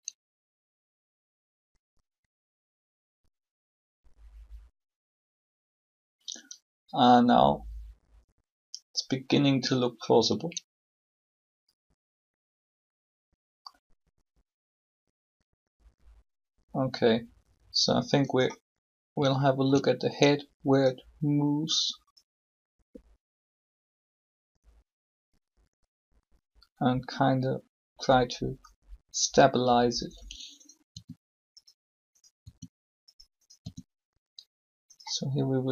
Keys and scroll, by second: 30.9 r.